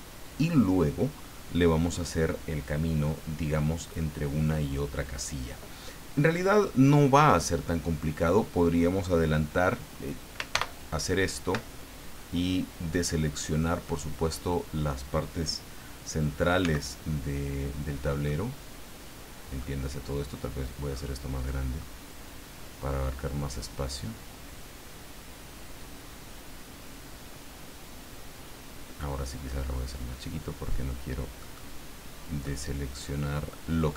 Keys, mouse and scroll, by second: 10.5 ctrl+i, 12.9 middle click, 13.8-15.0 middle drag, 16.6 c, 18.2-19.8 middle drag, 20.1-20.6 scroll down 1, 20.9 scroll down 1, 21.8-29.2 middle drag, 29.4-29.9 scroll up 1, 30.0-30.4 scroll up 1, 31.4 middle click, 32.4-33.9 middle drag.